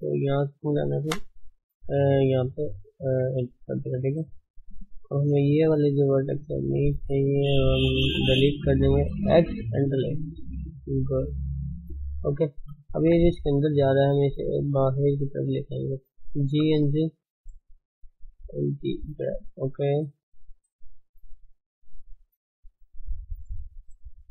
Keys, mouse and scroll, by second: 2.4 click, 4.5 ctrl+click, 4.8 middle click, 6.2 shift+click, 6.5-7.5 middle drag, 7.5 shift+click, 7.8 shift+click, 8.1 shift+z, 8.4-9.8 middle drag, 9.8 x, 10.1-11.2 middle drag, 11.2 Tab, 11.5-12.5 middle drag, 12.7 middle click, 12.8 scroll up 1, 13.0 Tab, 13.3 middle click, 14.0 shift+z, 14.7 click, 14.8 middle click, 15.2-20.7 middle drag, 15.3 shift+z, 16.3 g, 18.4 g, 19.5 click, 19.8 g, 20.7 click, 20.9 g, 22.2 click, 22.5 g, 23.4 scroll down 3, 23.6 middle click, 24.2-24.3 scroll up 3.